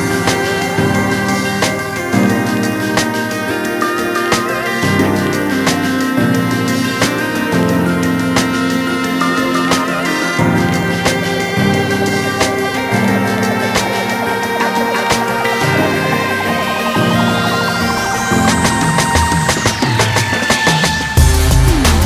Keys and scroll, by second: 16.0 ctrl+z.